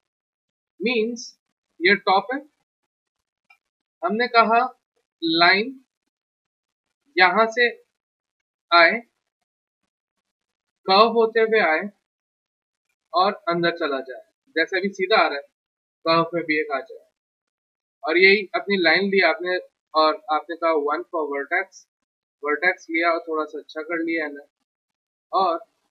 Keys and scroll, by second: 16.1 w, 20.0 Escape, 20.6 1, 25.1 1.